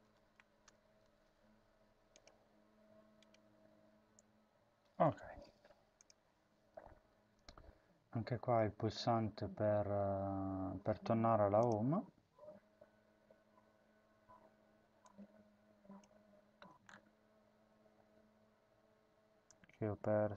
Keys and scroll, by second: 0.0-0.8 typing, 16.0 ctrl+c.